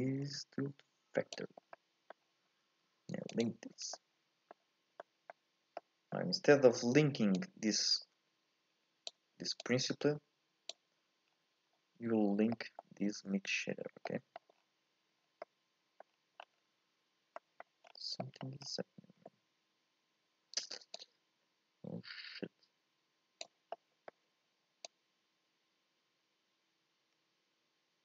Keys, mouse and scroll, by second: 1.4 click, 1.6 scroll up 1, 1.7-3.4 middle drag, 3.4 ctrl+shift+click, 9.0 click, 9.1 Escape, 9.7 click, 21.2-25.0 drag.